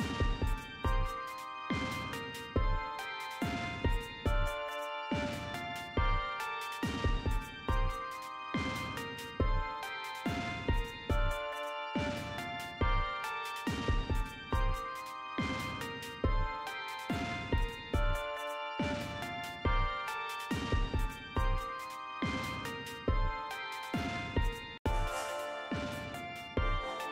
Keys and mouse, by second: 0.5 click, 0.7-2.0 typing, 3.1 click, 3.2-5.1 typing, 3.3 click, 4.1 click, 4.5 click, 6.4 click, 6.7 click, 6.9 click, 7.0 click, 7.9 click, 8.1-9.2 typing, 9.3 click, 23.3 click.